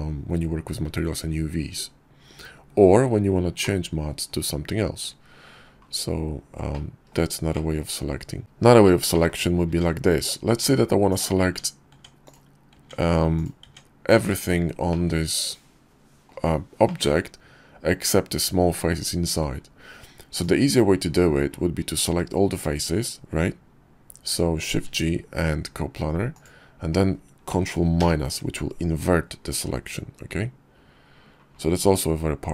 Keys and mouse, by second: 3.4 middle click, 6.6 click, 7.4 shift+middle click, 8.6 click, 9.2 Tab, 10.6 click, 10.9 Tab, 11.4 Tab, 12.2 Tab, 12.9 click, 13.1 Tab, 14.4-15.8 drag, 16.4 click, 19.8 click, 24.3 shift+g, 27.5 ctrl+i.